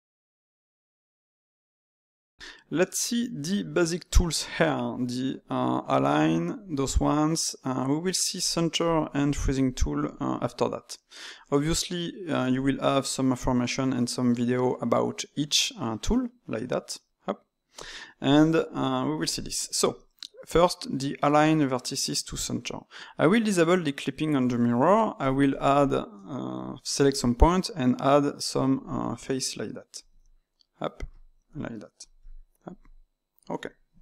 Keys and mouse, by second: 8.3 click, 8.8 click, 9.3 click, 11.6-14.6 drag, 24.5 ctrl+middle click, 25.2 click, 25.5 shift+click, 25.8 shift+click, 27.3 e, 28.9 e, 31.5 click, 32.1 click, 32.7 click, 33.9-34.0 middle drag.